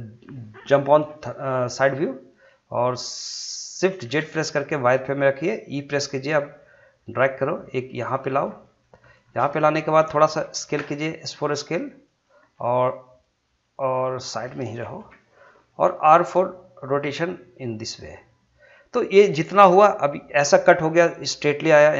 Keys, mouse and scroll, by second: 1.7 scroll up 1, 2.4 shift+middle click, 4.0 shift+z, 5.9 e, 8.0 click, 8.5 scroll down 1, 8.8 shift+middle click, 9.2 scroll up 1, 9.5 shift+middle click, 10.8 s, 12.1 click, 12.5 middle click, 16.4 r, 18.0 click.